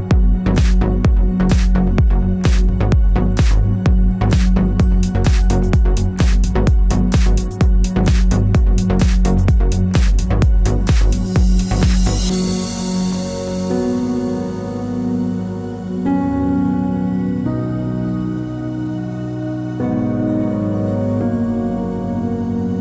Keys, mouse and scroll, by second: 0.2 g, 0.6 click, 0.7-1.8 middle drag, 1.8 click, 2.0 shift+click, 2.3 middle click, 2.6 g, 3.3 click, 3.3 middle click, 3.7 ctrl+z, 4.1 shift+click, 4.4 ctrl+z, 4.6 middle click, 4.7-5.1 scroll up 2, 5.1 shift+click, 5.7 ctrl+z, 5.8 shift+click, 6.8-10.7 middle drag, 6.8 s, 10.7 3, 10.9 click, 11.1 shift+click, 12.3 ctrl+z, 12.7 click, 12.9 shift+click, 14.6-15.8 middle drag, 15.8 click, 16.3 e, 16.3 click, 17.2 e, 17.3 Return, 17.5 s, 18.1 click, 18.8 click, 18.8-22.8 middle drag.